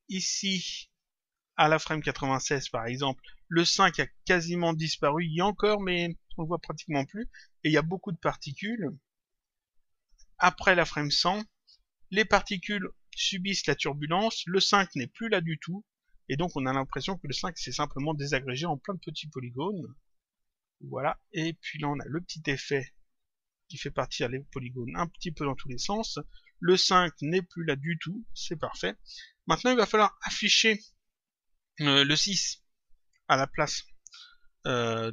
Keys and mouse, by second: 0.8 click, 2.6 click, 9.2 click, 10.8 click, 14.2 click, 19.9 click, 24.4 click, 27.4 click.